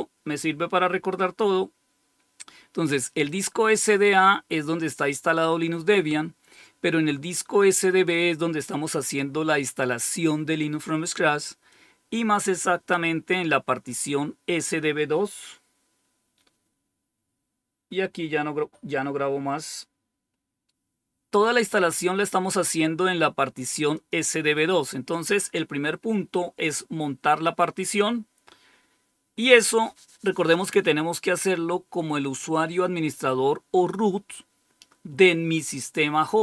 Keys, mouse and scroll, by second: 1.0-3.2 drag, 11.6-13.9 drag, 23.8 click.